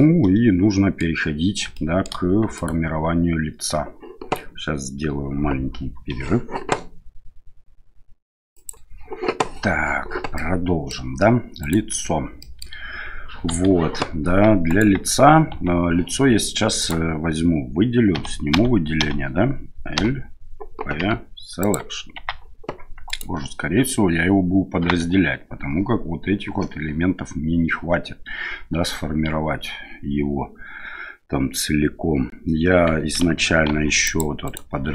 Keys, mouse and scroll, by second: 0.0-1.0 middle drag, 1.7-2.1 shift+middle drag, 2.6 right click, 10.4-10.9 middle drag, 11.6 right click, 12.4 middle drag, 13.5 KP_1, 14.7 right click, 15.5 Tab, 16.8 right click, 18.1-21.0 typing, 22.2 Tab, 23.1 right click, 25.0 Tab, 33.7 ctrl+r.